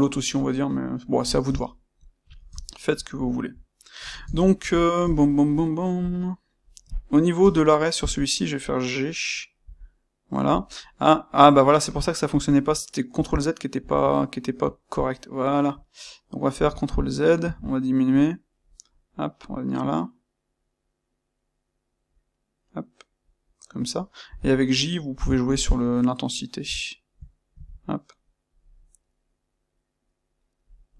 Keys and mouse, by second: 6.9 click, 7.3 space.